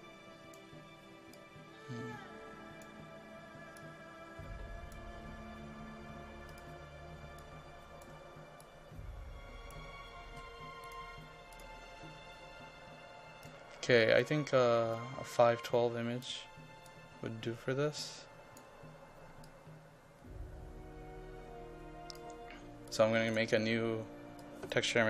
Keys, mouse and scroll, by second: 3.2-10.3 drag, 15.3-25.0 drag.